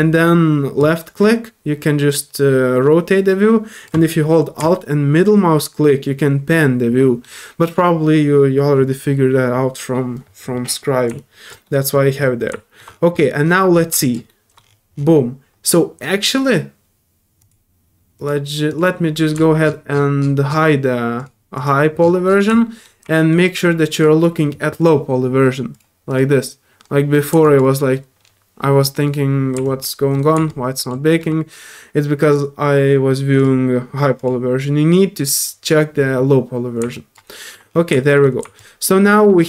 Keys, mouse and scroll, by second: 0.8-3.8 drag, 5.2-7.2 middle drag, 11.1 alt+click, 11.6 alt+middle click, 12.2 scroll up 1, 12.5 alt+middle click, 12.8 scroll up 2, 13.7 scroll down 1, 14.0 click, 14.3 middle click, 16.2 click, 17.4 click, 18.2 click, 18.7 click, 19.6 alt+middle click, 21.2 alt+click, 21.5 alt+click, 22.0 alt+middle click, 22.6 middle click, 23.1 alt+middle click, 23.9 alt+click, 24.8 alt+click, 25.7 alt+click, 26.1 click, 27.4 click, 27.8 alt+middle click, 28.3 scroll down 1, 29.6 alt+click, 30.0 alt+middle click, 30.5 alt+click, 31.0 alt+middle click, 33.4 alt+click, 34.2 click, 36.9 alt+click, 37.3 alt+middle click, 38.0 alt+middle click, 38.6-39.4 alt+drag.